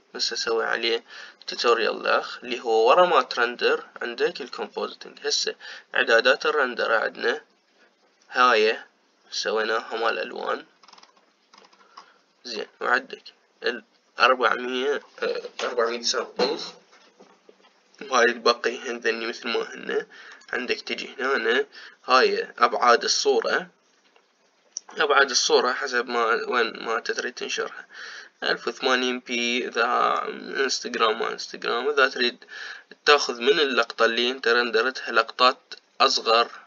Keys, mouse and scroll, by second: 10.9-13.7 scroll up 17, 13.7-16.2 scroll up 2, 16.2-16.7 scroll up 1, 21.5 click.